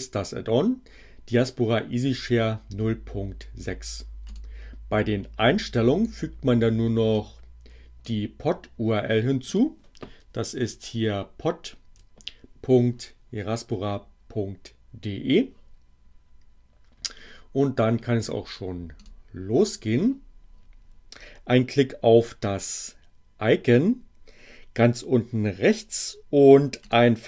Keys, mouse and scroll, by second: 4.3 click, 7.1-8.2 drag, 9.4 click, 10.7 Right, 18.9 click, 26.8 click.